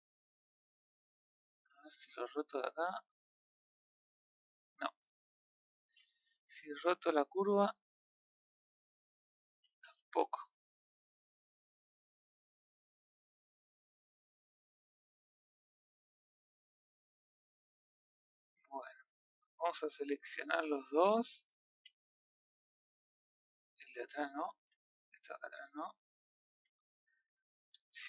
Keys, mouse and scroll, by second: 1.6-3.8 middle drag, 3.8 click, 5.7 ctrl+z, 6.9 click, 7.7 click, 9.9 ctrl+z, 11.0 click, 12.4 click, 17.6-18.9 middle drag, 18.9 scroll up 1, 19.1 middle click, 19.9 KP_3, 20.4 KP_1, 21.7 a, 23.3 middle click, 23.6-24.2 scroll down 1, 24.2-24.5 middle drag, 24.5 c.